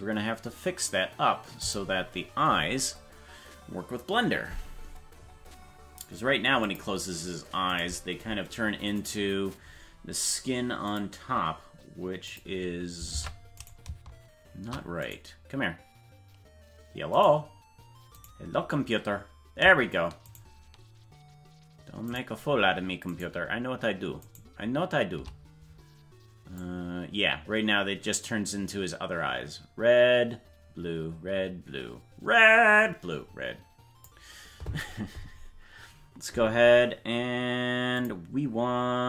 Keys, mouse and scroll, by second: 9.0 right click, 10.8 click, 12.2 click, 13.1 ctrl+Tab, 18.8 right click, 20.9 shift+right click, 26.5-34.1 drag.